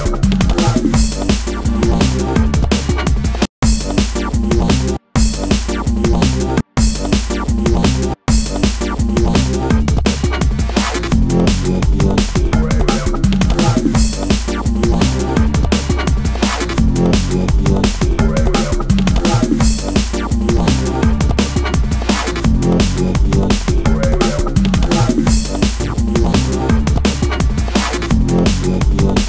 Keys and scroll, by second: 1.7 space, 3.2 space, 4.8 space, 6.3 space, 21.7 super+a, 22.9 shift+Down.